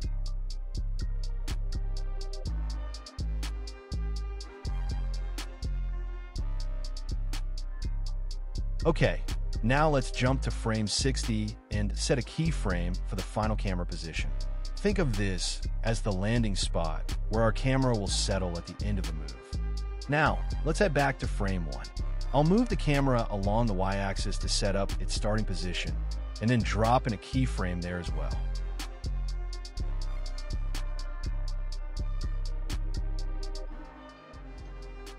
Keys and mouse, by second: 1.4-2.5 drag, 2.9 Delete, 4.5 click, 4.9 g, 5.0 x, 5.8-6.5 middle drag, 6.8 middle drag, 7.2 KP_0, 11.0 click, 13.1-14.3 drag, 19.7 i, 22.2-22.6 drag, 24.5 shift+Left, 25.9 g, 26.7 y, 29.8 g, 29.9 y, 33.5 i, 34.1 space.